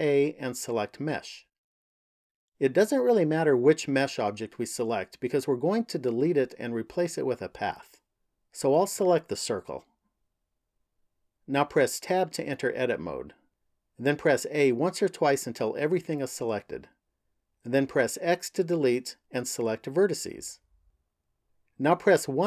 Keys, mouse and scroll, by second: 12.0 Tab, 14.0 a, 14.9 a, 18.3 x, 22.3 KP_1.